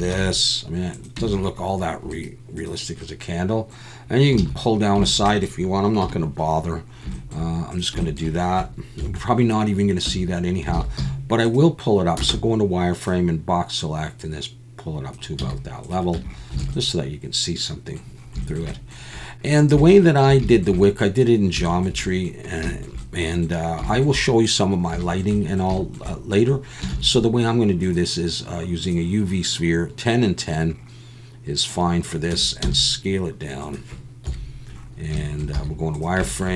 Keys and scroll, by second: 0.1 ctrl+b, 1.2 Tab, 4.4 alt+a, 6.0 /, 9.0 KP_1, 10.0 Tab, 10.7 alt+a, 11.0 z, 12.2 b, 15.4 z, 16.1 Tab, 16.6 alt+a, 26.9 shift+a, 32.3 Tab, 32.6 s, 34.2 KP_1, 35.5 z.